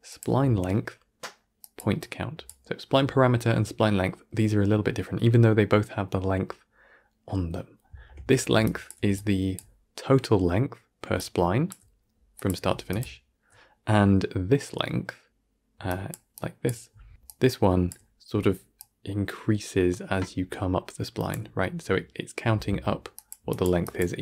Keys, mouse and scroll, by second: 0.1 shift+a, 8.5-24.2 drag.